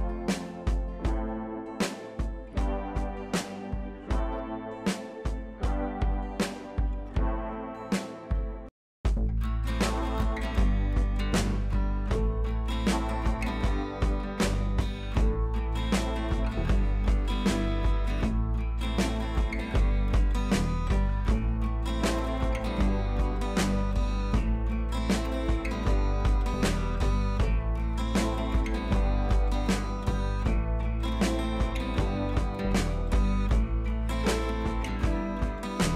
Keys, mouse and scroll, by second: 4.8-8.0 drag, 14.2-15.0 scroll down 1, 15.0 click, 18.0-19.6 drag, 27.1-27.6 typing.